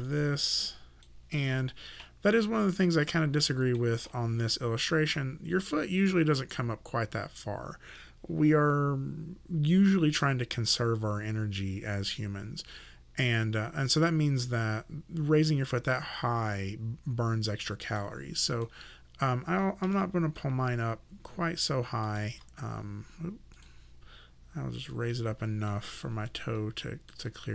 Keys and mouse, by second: 0.1 click, 3.0 click, 18.0 click, 19.9 w, 22.1 click, 22.3 w, 23.6 click, 26.3 click, 27.3 alt+right click.